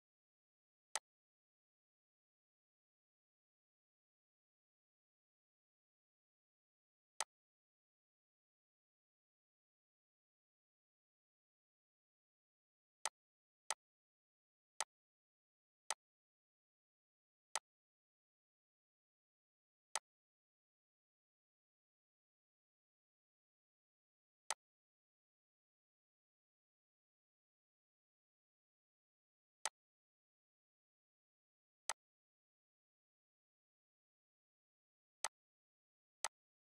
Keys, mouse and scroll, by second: 0.5 click, 0.9-5.9 shift+drag, 7.2-24.0 drag, 24.5-29.7 drag, 31.8-33.2 drag, 33.2 right click, 35.2 click.